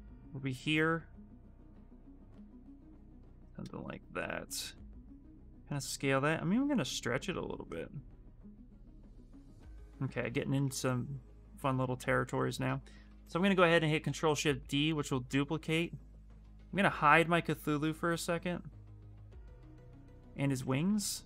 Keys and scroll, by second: 9.8 q, 13.8 shift+d.